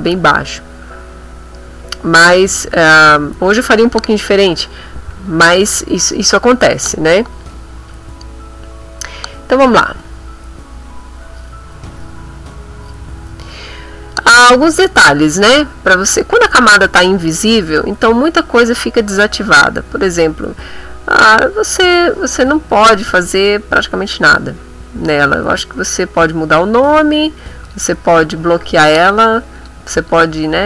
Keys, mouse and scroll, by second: 17.1 click, 20.7 click, 22.5 click, 25.4 click, 26.6 click, 27.6 click, 28.7 click, 29.5 click, 29.9 click.